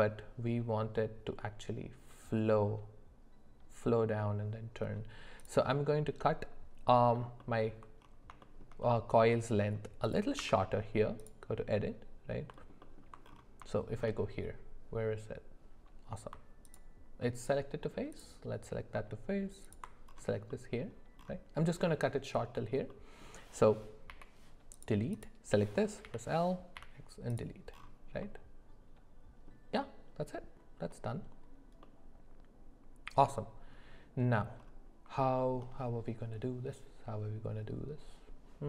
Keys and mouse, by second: 5.4 click, 7.2 alt+middle click, 7.4 alt+middle click, 8.4 shift+middle click, 8.8 middle click, 10.0 click, 10.4 Tab, 12.6 alt+middle click, 12.8 alt+middle click, 13.7 shift+middle click, 16.7 alt+click, 18.1 click, 19.6 alt+click, 20.5 middle click, 22.9 middle click, 24.1 x, 26.0 l, 26.7 x, 28.2-29.5 middle drag, 31.8-33.2 middle drag, 35.2 shift+middle click.